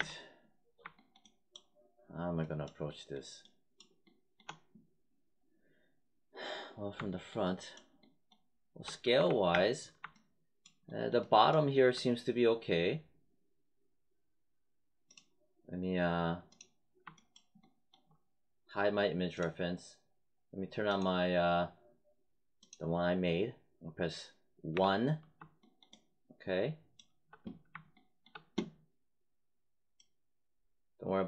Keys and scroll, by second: 9.1 4, 9.4 space, 24.7 1.